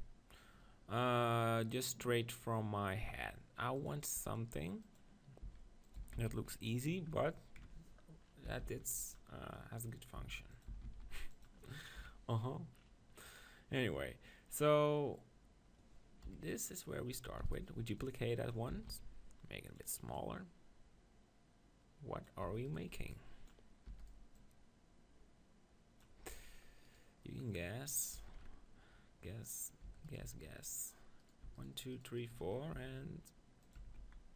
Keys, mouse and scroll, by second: 0.6-3.4 middle drag, 4.1-5.6 drag, 5.4 s, 6.0-7.8 drag, 6.0 s, 8.2 middle click, 8.5 s, 9.1-12.0 drag, 10.2 s, 10.7 s, 12.0 KP_1, 16.3 KP_1, 17.4 shift+d, 18.0-19.4 drag, 18.0-20.2 right drag, 18.7 s, 20.2-22.1 drag, 22.5 Tab, 22.6-26.1 drag, 23.0 b, 23.9 e, 24.4-26.1 right drag, 26.4 Tab, 26.9 click, 28.2 Tab, 29.8 Tab, 30.2 Tab, 32.8 e, 33.7-34.3 drag, 33.7 right click, 33.8 Tab, 34.0 z.